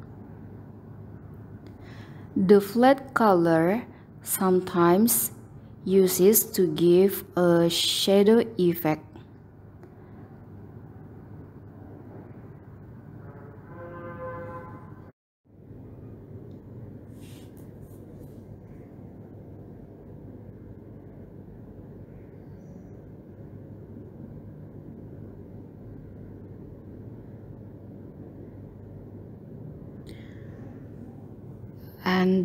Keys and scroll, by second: 13.6 ctrl+k, 23.3 ctrl+u, 29.2 ctrl+Home.